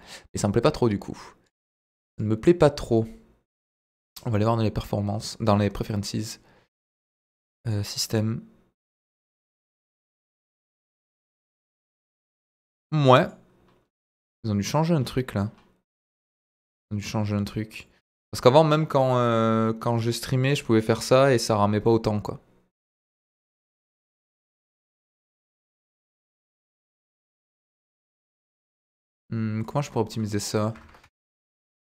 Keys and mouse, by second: 1.4-5.6 drag, 19.1-25.3 middle drag, 26.9 click, 27.5-28.5 middle drag, 29.6-31.3 drag, 31.8-31.9 middle drag.